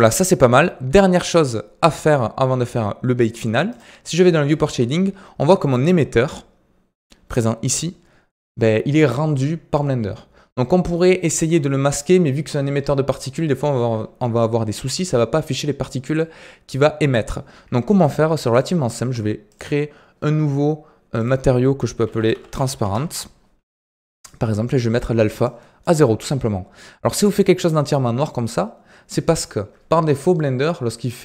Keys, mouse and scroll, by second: 0.0-4.5 middle drag, 4.5 click, 6.1-6.9 scroll up 3, 6.9-7.6 middle drag, 7.6 scroll up 2, 14.8 scroll down 2, 15.0-18.4 middle drag, 18.4 click, 19.4-23.6 drag, 23.6-25.4 middle drag, 25.4-26.5 drag, 26.5-26.9 scroll up 3, 26.9-30.0 middle drag.